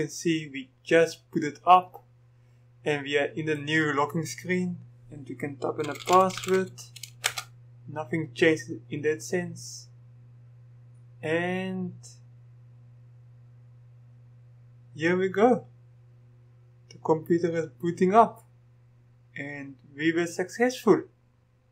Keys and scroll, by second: 5.7-7.1 typing, 7.3 Return.